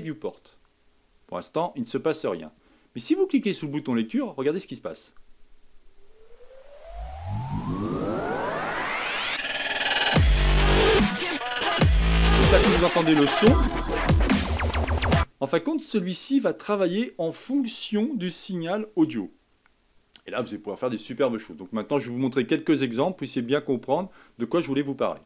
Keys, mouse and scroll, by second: 0.0 click, 0.6-1.4 scroll down 3, 1.4-5.0 middle drag, 5.0-8.2 drag, 15.1 click, 15.7-25.2 middle drag.